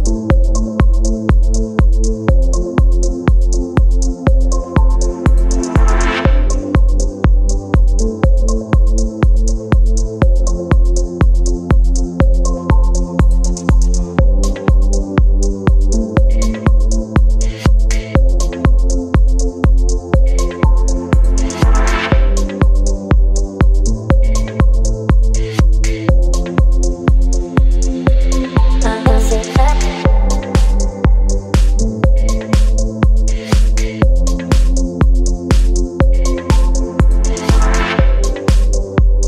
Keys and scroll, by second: 4.1 space, 5.8 space, 19.7 v, 20.1 space, 33.9 ctrl+z, 37.2 space.